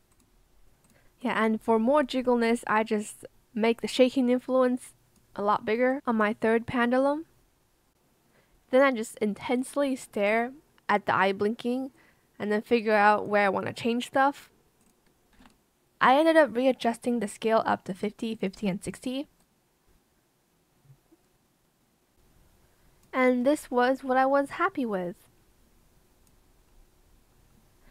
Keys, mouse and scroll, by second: 10.3 KP_6, 10.3 KP_0, 10.4 Return, 15.3 KP_5, 15.3 KP_0, 15.4 Return, 18.5 KP_5, 18.5 KP_0, 18.6 Return.